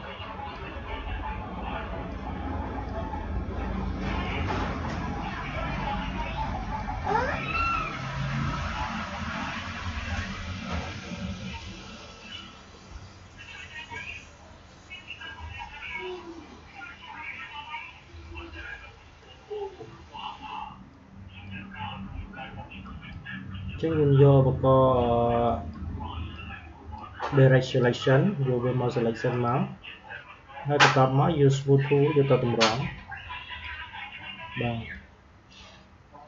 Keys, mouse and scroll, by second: 25.3-36.2 drag.